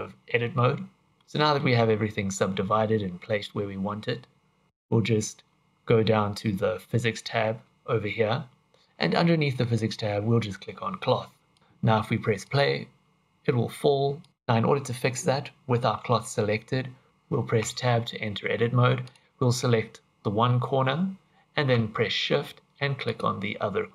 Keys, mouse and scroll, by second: 11.5 click, 11.6 scroll down 1, 12.4 click, 14.2 click, 14.3 click, 17.1 Tab, 17.6 Tab, 19.0 click, 23.0 shift+click.